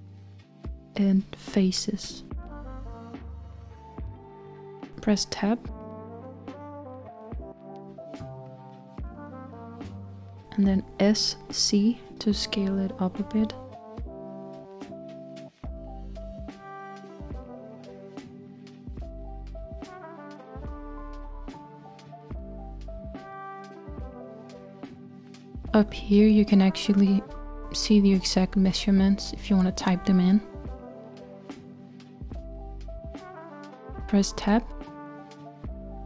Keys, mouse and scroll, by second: 6.7 Tab, 7.8 Tab, 12.0 s, 17.4 z, 19.4 s, 23.8 z, 25.7 click, 28.3 s, 30.5 z, 32.8 Tab, 33.8 Tab, 33.8 Tab, 33.9 Tab.